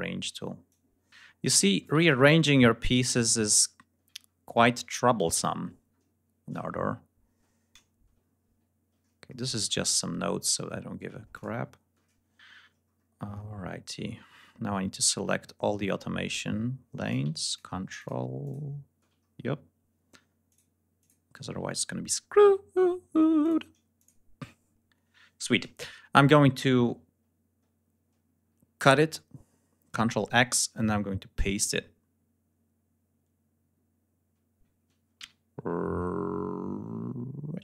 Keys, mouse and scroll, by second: 0.6-1.9 drag, 1.9 ctrl+scroll up 2, 3.3-4.3 ctrl+scroll down 6, 4.8-6.0 scroll down 6, 6.3-7.2 scroll down 7, 9.0-10.5 ctrl+shift+scroll up 6, 11.2 ctrl+shift+click, 12.7-13.0 scroll down 2, 13.0-13.6 scroll up 2, 13.8 scroll down 2, 14.7-15.2 scroll down 4, 15.4-16.7 scroll up 4, 17.4 ctrl+click, 17.9 ctrl+click, 18.3 ctrl+click, 19.1-19.6 ctrl+scroll up 3, 20.4 ctrl+click, 20.9 ctrl+click, 21.7-22.7 ctrl+scroll up 5, 23.3 ctrl+click, 23.9 ctrl+click, 24.5-24.9 ctrl+scroll up 3, 28.7 ctrl+x, 35.1 ctrl+v.